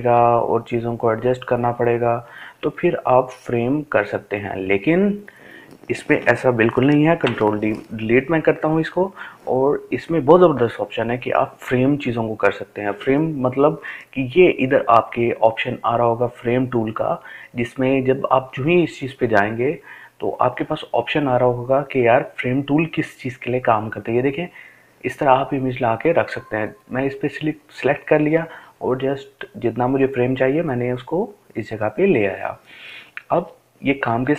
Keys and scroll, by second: 2.2 Delete.